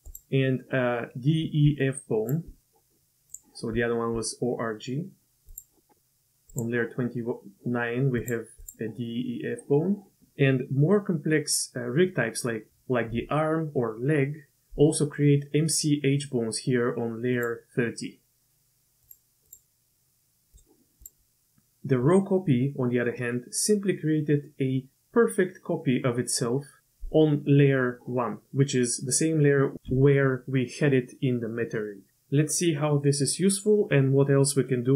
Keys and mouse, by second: 1.6-2.4 d, 1.8 click, 3.3 click, 3.7 d, 6.5 click, 8.2 click, 8.6 click, 17.3 click, 19.0 click, 19.4 click, 20.5-21.0 drag.